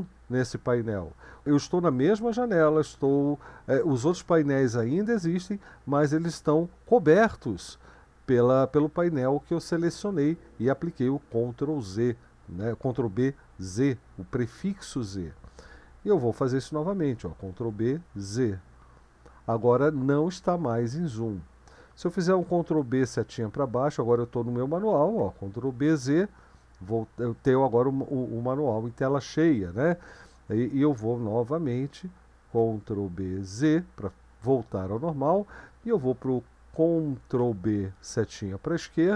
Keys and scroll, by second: 17.5 ctrl+b, 18.1 z, 22.4 ctrl+b, 23.0-39.1 Down, 25.4 ctrl+b, 25.9 z, 32.6 ctrl+b, 33.6 z, 37.4 ctrl+b, 38.0 Left.